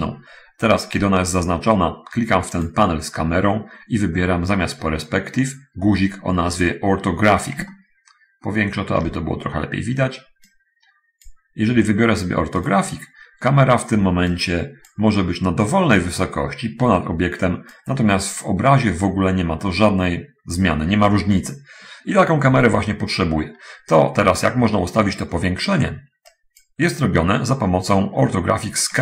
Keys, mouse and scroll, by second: 2.7 click, 8.0-9.5 ctrl+middle drag, 10.8 click, 13.0 click, 14.7 click, 16.0-18.1 drag, 23.8-24.8 middle drag, 25.0 middle click, 26.6 click.